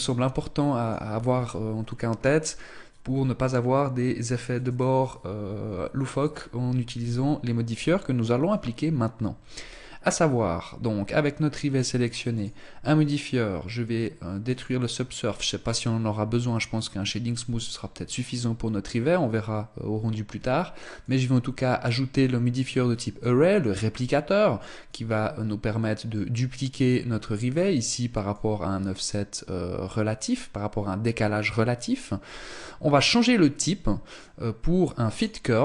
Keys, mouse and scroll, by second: 11.9 click, 14.1 click, 20.6 click, 24.5 click, 27.9 click, 33.7 click.